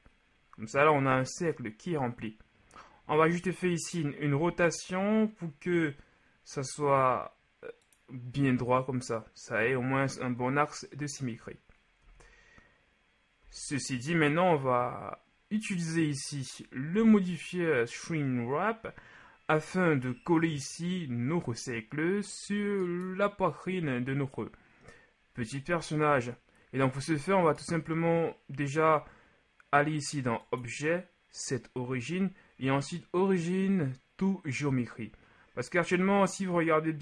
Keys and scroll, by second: 4.3 r, 12.0 z, 16.9 Tab.